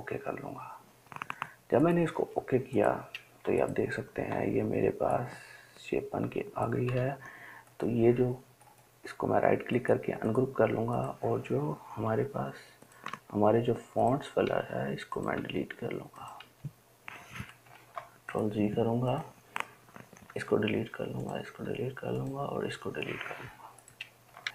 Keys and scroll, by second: 3.7 ctrl+space, 4.2 ctrl+space, 5.1-7.1 ctrl+space, 12.4 Delete, 13.3 Delete, 16.7 Delete, 18.1 ctrl+z, 20.5 Delete, 21.7 Delete, 22.8 Delete.